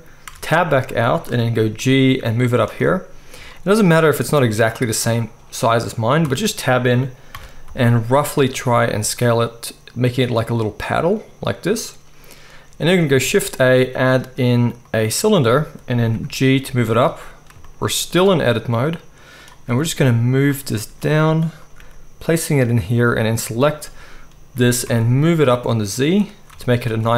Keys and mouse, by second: 0.2 Tab, 1.6 g, 3.1-4.7 shift+middle drag, 6.2 Tab, 7.3 s, 8.3-10.4 middle drag, 13.1-16.2 shift+middle drag, 13.2 shift+a, 16.1 g, 17.5-23.3 shift+middle drag, 18.1 s, 19.7 g, 20.9 s, 21.8 g, 23.3 click, 23.4-27.1 middle drag, 24.6 g, 26.5 Tab, 26.8 z.